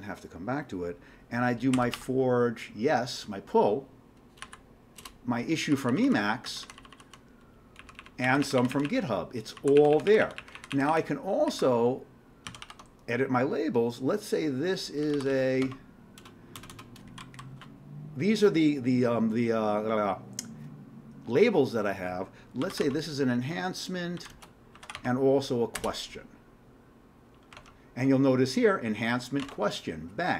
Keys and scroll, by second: 1.5-2.3 typing, 4.4 Down, 5.0 Return, 5.7 Down, 5.9 Down, 6.1 Down, 6.5 Down, 7.8 Up, 8.0 Up, 8.3 Up, 8.4 Up, 9.6 Down, 9.8 Up, 9.9 Up, 10.1 Up, 10.2 Up, 12.5 ctrl+c, 12.6 ctrl+e, 14.8-17.7 typing, 22.4-25.4 typing, 25.8 Return, 27.5 alt+Tab, 29.4 alt+Tab.